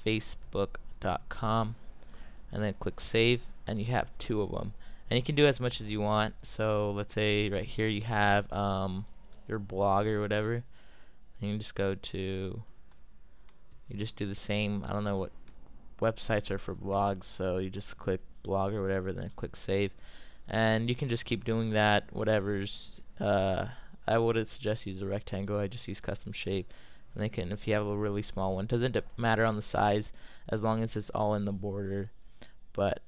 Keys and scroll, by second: 0.0-1.8 typing, 13.4-17.6 typing.